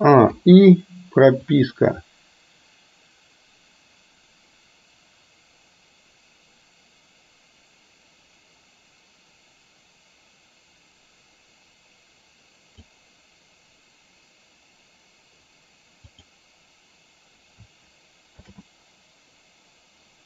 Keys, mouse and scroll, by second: 0.4 i, 1.6-13.0 drag, 16.1 click, 18.6 shift+d.